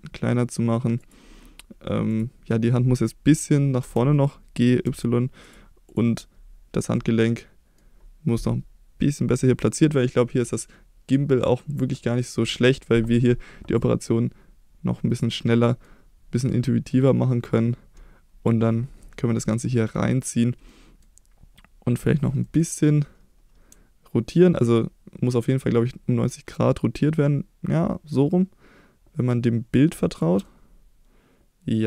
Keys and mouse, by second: 1.0 click, 2.1 click, 3.8 g, 4.9 y, 5.9 click, 6.2-6.8 middle drag, 7.2-7.8 middle drag, 11.3 click, 13.8-15.2 drag, 15.3-15.8 middle drag, 16.5-18.5 drag, 19.0-20.2 middle drag, 20.7-21.0 middle drag, 22.0 click, 22.4 middle click, 30.5-31.8 middle drag.